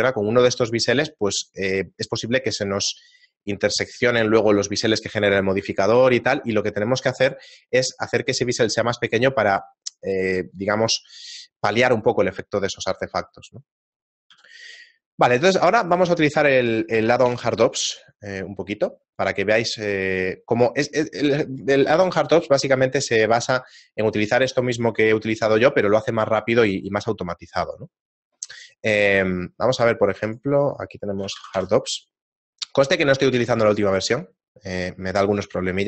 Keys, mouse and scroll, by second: 2.0 shift+middle click, 13.2 right click, 14.3 x, 15.3 middle click, 17.3 ctrl+alt+u.